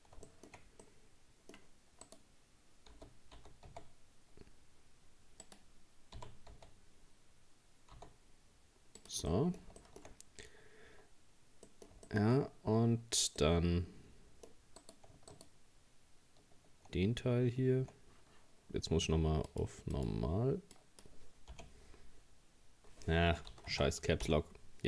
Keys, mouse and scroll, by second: 0.3 shift+middle click, 0.8 scroll up 1, 0.8-2.1 middle drag, 2.1 right click, 2.9 g, 6.2 g, 9.3 middle click, 10.2-11.7 scroll up 2, 11.7 middle click, 12.5-13.4 scroll down 1, 13.4-14.8 middle drag, 14.8 right click, 15.3 shift+right click, 19.5-22.5 drag.